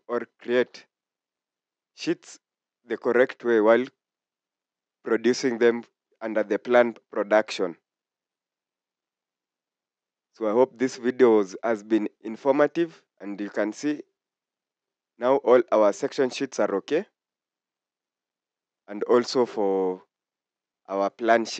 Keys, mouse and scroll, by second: 3.8 scroll up 1, 9.4 scroll down 1, 17.0-17.6 scroll down 1.